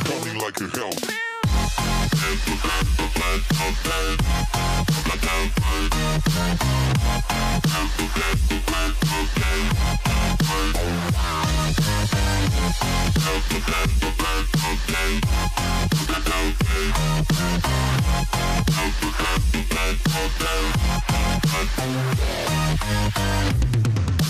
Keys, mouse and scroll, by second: 1.3-4.3 drag, 4.6 click, 5.5 click, 7.6 alt+z, 8.0 scroll up 2, 8.8 scroll down 1, 9.7 e, 13.8 s, 17.2 s, 22.2 s.